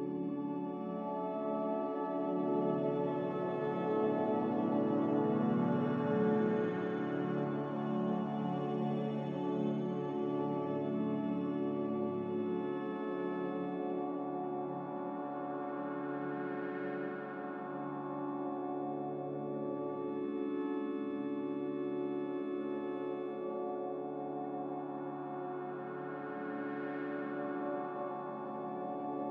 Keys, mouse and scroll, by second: 3.5 Escape, 4.3 x, 5.8 z, 6.9 Delete, 7.5 ctrl+z, 10.4 x, 11.8-13.9 typing, 15.9 x, 17.6-18.7 typing.